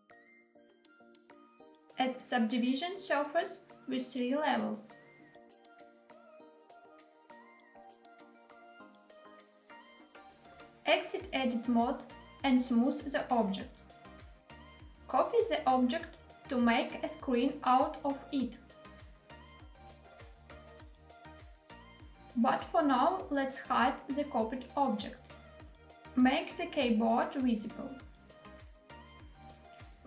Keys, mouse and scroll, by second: 2.9 click, 4.3-6.4 drag, 8.1 click, 8.9 click, 10.4 Tab, 12.3 right click, 18.9 shift+d, 21.2 click, 23.0 click, 25.0 click, 27.1 click, 28.5 click, 29.7 s.